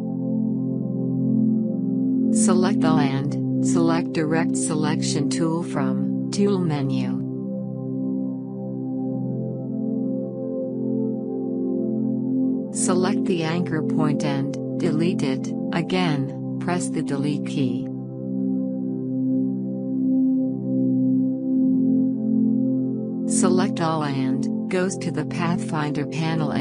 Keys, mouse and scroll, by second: 3.7-7.0 drag, 13.9-17.6 drag, 19.0-23.7 drag, 26.3 click.